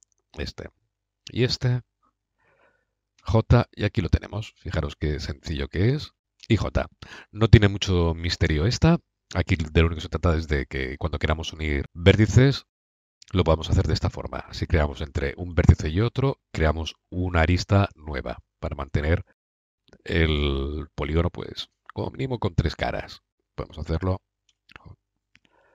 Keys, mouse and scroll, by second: 3.0 j, 5.2-6.2 drag, 6.2 j, 12.2 middle click, 23.3-24.4 drag, 24.4 j, 25.2 Escape.